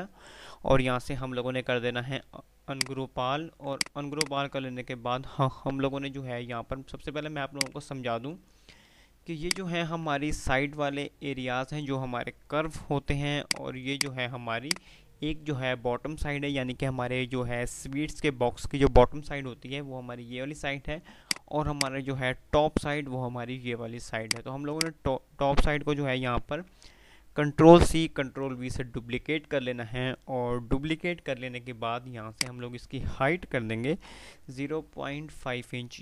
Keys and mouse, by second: 2.9 click, 6.0 F3, 7.2 F2, 7.6 click, 7.9-8.6 F2, 9.6 click, 13.6 click, 21.6 click, 24.2 click, 32.5 click.